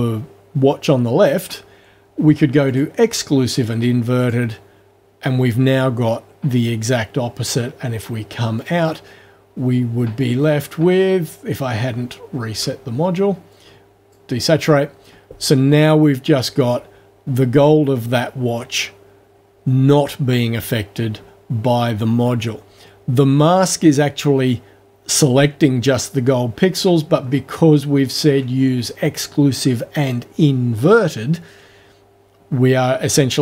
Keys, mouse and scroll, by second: 2.7 click, 4.2 click, 8.6 click, 10.6-11.2 ctrl+alt+scroll up 2, 11.9-12.3 ctrl+alt+scroll up 2, 13.5 click, 27.2-27.7 ctrl+alt+scroll down 2, 28.1 ctrl+alt+scroll down 2.